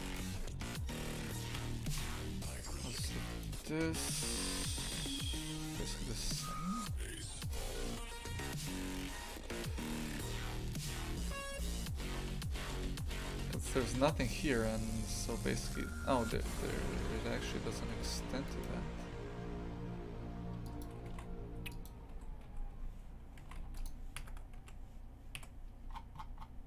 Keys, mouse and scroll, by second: 1.5 KP_Divide, 1.9 shift+f, 7.4 right click, 10.7-16.3 shift+right drag, 16.3 shift+f, 20.8 click, 21.1 shift+f, 22.4 a, 23.4 shift+f, 24.1 KP_1, 25.9-26.4 scroll down 16.